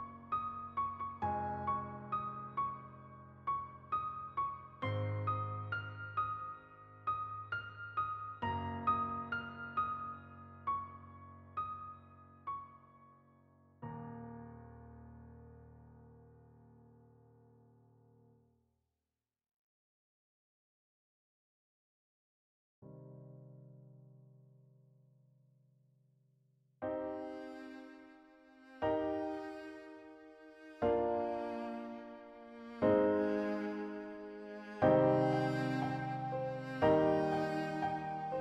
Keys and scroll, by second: 0.0 shift+a, 0.6 ctrl+n, 0.7 ctrl+Return, 1.0 alt+z, 2.9 shift+a, 4.8 ctrl+w, 5.3 w, 5.7 Tab, 5.9 z, 6.6 alt+Tab, 7.3 shift+f, 7.4 a, 7.8 7, 10.6 Tab, 12.3 Tab, 13.6 Tab, 17.1 Tab, 17.8 shift+a, 18.4 shift+w, 20.1 z, 21.3 shift+a, 22.0 ctrl+a, 23.4 ctrl+g, 25.0 a, 26.4 ctrl+shift+a, 26.6 ctrl+shift+a, 28.0 shift+g, 29.0 g, 29.8 shift+a, 30.4 ctrl+shift+a, 31.6 ctrl+g, 32.7 a, 35.0 ctrl+r, 35.8 g, 37.5 r.